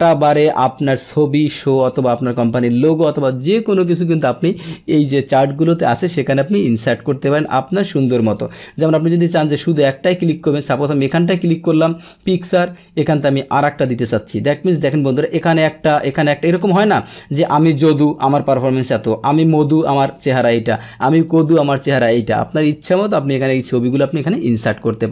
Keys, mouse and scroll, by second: 8.2 click, 10.1 click, 12.1 click, 13.3 click, 13.5 click, 15.2 click, 15.9 click, 16.5 click, 17.4 click, 19.4 click, 21.0 click.